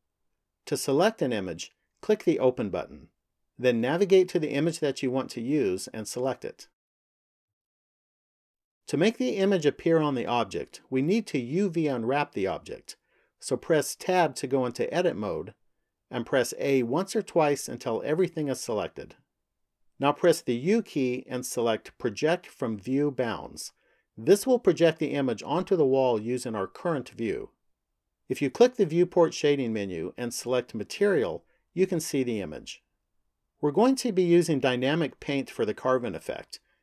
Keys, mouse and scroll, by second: 2.5 click, 8.9 click, 13.9 Tab, 16.4 a, 17.5 a, 20.5 u, 28.6 click, 31.3 click.